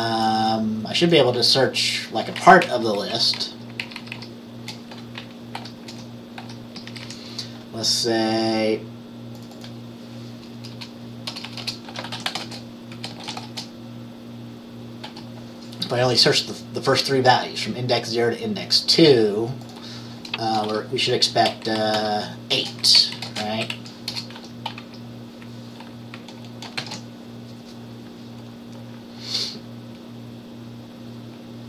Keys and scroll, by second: 2.7 Left, 3.1 Right, 3.5 Left, 3.9 shift+Down, 4.1 shift+Down, 4.3 shift+Down, 5.7 ctrl+c, 6.0 ctrl+v, 6.5 ctrl+v, 7.0 Up, 7.1 Up, 10.9-13.9 typing, 15.2 typing, 20.7 BackSpace, 20.8 BackSpace, 21.8 Right, 22.1 BackSpace, 22.7 space, 23.1 Left, 23.3 Left, 23.4 space, 23.5 Right, 24.2 BackSpace, 24.5 ctrl+s, 26.9 ctrl+b.